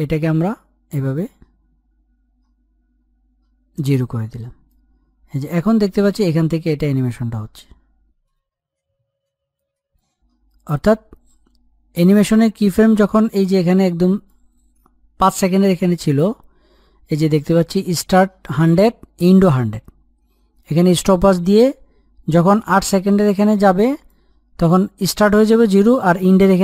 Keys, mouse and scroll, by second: 15.6 Page_Up, 22.8-26.5 drag.